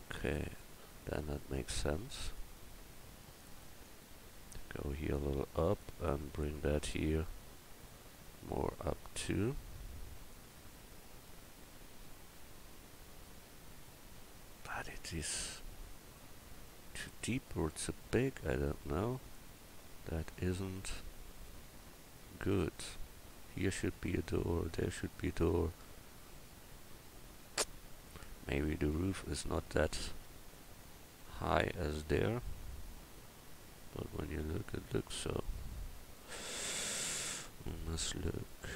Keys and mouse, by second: 2.4-5.1 right drag, 3.2-10.3 drag, 8.2 right click, 20.2-21.3 middle drag, 28.5 middle drag.